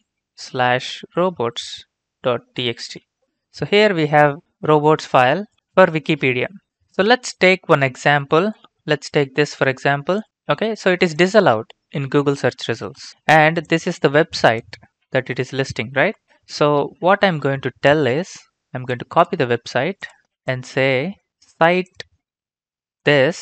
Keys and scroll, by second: 0.0-3.7 typing, 10.3 ctrl+c, 20.2 ctrl+c.